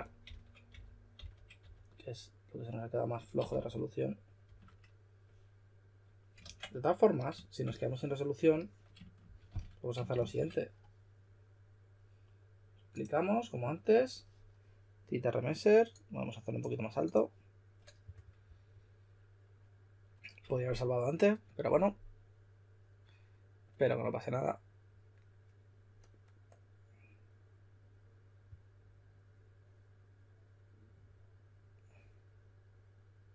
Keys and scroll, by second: 0.0-2.0 typing, 3.4-4.3 typing, 6.3 super+z, 8.9-10.7 typing.